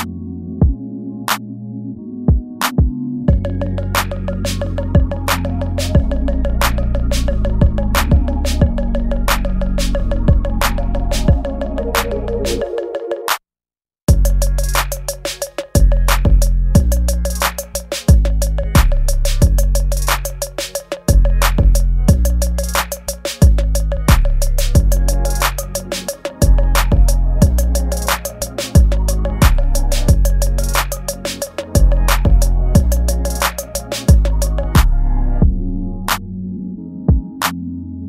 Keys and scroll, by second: 7.2 ctrl+z, 8.8 ctrl+z, 10.9 space, 14.5 space, 14.9 ctrl+z, 15.6 ctrl+z, 16.0 space, 16.3 space, 19.6 ctrl+z, 20.8 space, 21.4 ctrl+z, 22.0 ctrl+z, 22.7 ctrl+z, 26.3 ctrl+z, 26.6 ctrl+z, 27.3 space, 29.2 space, 29.6 ctrl+z, 29.8 ctrl+z, 30.6 ctrl+z, 31.0 space, 31.4 ctrl+z, 31.6 space, 34.7 ctrl+z, 35.0 ctrl+z, 37.0 ctrl+z, 37.8 ctrl+z.